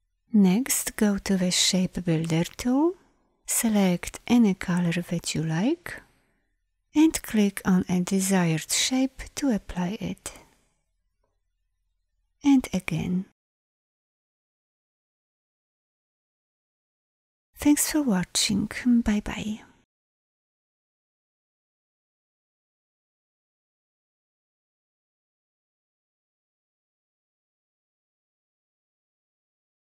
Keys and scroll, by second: 0.8 shift+m.